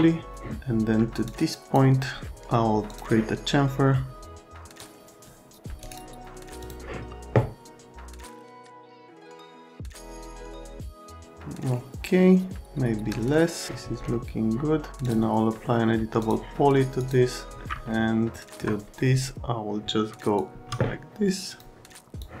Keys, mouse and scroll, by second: 1.2 click, 2.9 click, 4.8 click, 6.6 click, 8.1 click, 8.5 click, 9.2 click, 9.8 click, 10.5 t, 15.0 click, 16.2 click, 17.0 middle click, 17.9 alt+right click.